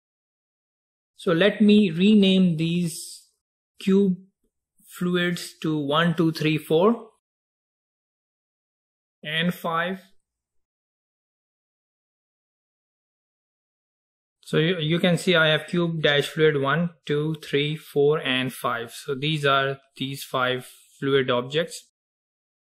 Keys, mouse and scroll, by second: 7.7-11.0 drag, 11.2-13.1 typing, 11.5 click, 12.0 click, 12.9 click.